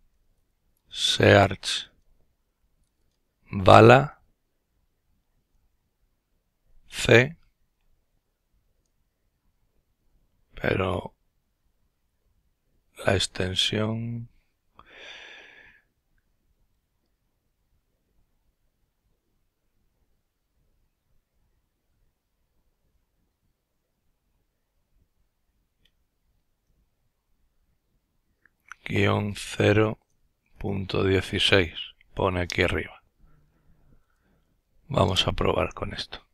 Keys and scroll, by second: 1.1-2.6 typing, 5.4 c, 27.0-29.8 typing, 30.9 typing, 32.4 typing, 33.5 Return.